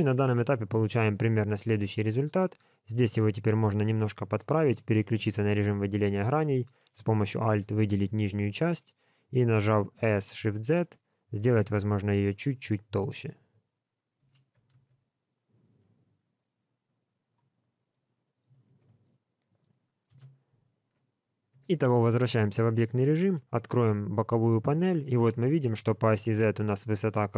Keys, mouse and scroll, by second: 0.6-1.1 scroll down 1, 1.1 middle click, 3.7 3, 4.2 middle click, 6.6 alt+click, 12.4 middle click, 14.2 s, 17.5 scroll down 2, 17.9 middle click, 18.7 alt+a, 19.0 middle click, 20.0 KP_1, 20.7 scroll up 2, 21.5 Tab, 23.4 n.